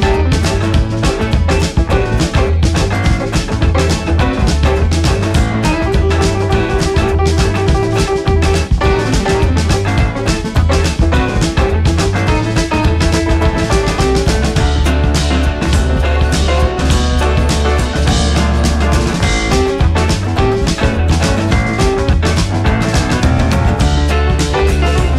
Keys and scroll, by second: 0.2 Right, 0.5 Up, 1.0 Left, 1.3 Down, 2.1 Right, 5.6 Down, 7.4 ctrl+=, 19.2 Down, 21.0 Down, 22.9 Right, 23.3 Down, 24.5 Left, 24.8 Up, 24.9 Right.